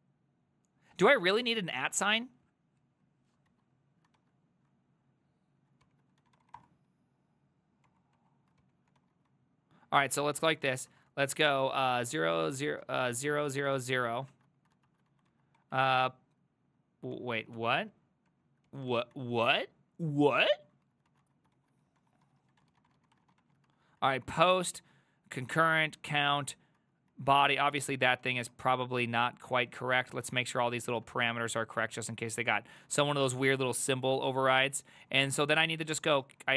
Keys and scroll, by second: 1.5 ctrl+c, 3.6 alt+{, 4.2 ctrl+v, 4.7 ctrl+Left, 5.4 ctrl+Left, 5.5 ctrl+Left, 5.9 ctrl+c, 6.0-7.0 typing, 7.9 Up, 8.2 Up, 8.6 ctrl+c, 8.7-9.5 typing, 10.0 ctrl+Left, 10.1 ctrl+Left, 10.5 ctrl+Left, 10.7 ctrl+Left, 10.9 ctrl+Right, 11.6 ctrl+w, 11.8-15.6 typing, 15.8 ctrl+Right, 16.0 ctrl+Right, 16.7 Left, 17.2 ctrl+z, 17.6 ctrl+c, 18.3 Up, 18.7 ctrl+c, 18.9 ctrl+v, 19.2 ctrl+Left, 19.4 ctrl+Left, 19.7 ctrl+Left, 19.8 ctrl+Left, 20.0 ctrl+Left, 20.1 ctrl+Left, 20.3 ctrl+Left, 20.5 ctrl+Left, 20.6 ctrl+Left, 20.8 ctrl+Left, 21.1-22.2 ctrl+Right, 21.6 ctrl+w, 21.7-23.9 typing, 24.0 ctrl+Right, 24.2 ctrl+Right, 24.4 ctrl+Right, 24.8 ctrl+Right, 25.4 ctrl+Left, 25.6 ctrl+Right, 26.0 ctrl+Right, 26.2 ctrl+Right, 26.8 ctrl+Right, 27.1 ctrl+Left, 27.3 ctrl+Left, 27.7-28.5 typing, 29.3 ctrl+Left, 29.8 ctrl+Left, 30.2 BackSpace, 30.3 -, 30.5 ctrl+Right, 30.8 ctrl+Left, 31.0 ctrl+Right, 31.9 BackSpace, 32.0 -, 32.2 ctrl+Left, 32.3 ctrl+Left, 32.5 ctrl+Left, 32.7 ctrl+Left, 33.1 BackSpace, 33.2 -, 33.4-34.5 ctrl+Right, 35.0 ctrl+w, 35.3 ctrl+w, 35.6-36.5 typing.